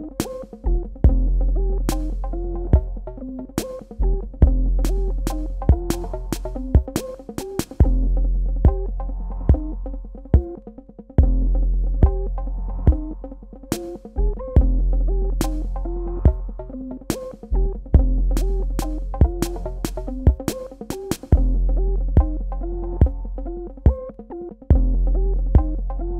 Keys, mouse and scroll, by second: 0.2 click, 3.1 space, 3.5 ctrl+alt+click, 10.8 alt+click, 13.1-14.7 typing, 14.9 ctrl+alt+click, 16.3 ctrl+d, 17.0 ctrl+d, 17.4 space, 17.5 click, 18.0 ctrl+alt+click, 20.7 space, 20.9 ctrl+click, 23.0 alt+click.